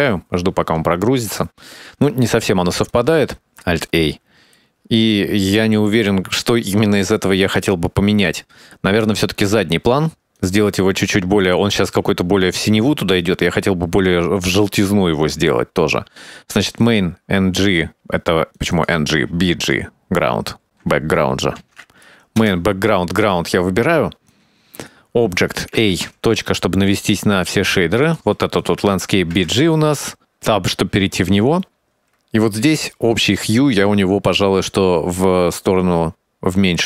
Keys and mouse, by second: 0.0 click, 3.6 alt+a, 4.1-4.9 shift+middle drag, 10.7 click, 17.1 click, 19.1 click, 19.4-22.9 drag, 24.7 click, 26.2 a, 26.4 KP_Decimal, 28.4 click, 29.6 Tab, 30.8-32.1 middle drag, 33.1 middle click, 34.5 middle click, 35.4-36.8 shift+drag.